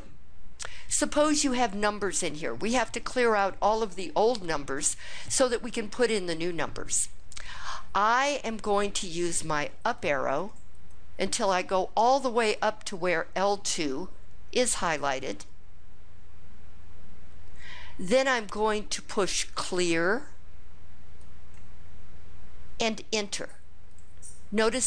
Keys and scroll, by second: 9.7 Up, 10.1 Up, 10.5 Up, 11.2 Up, 23.7 Return.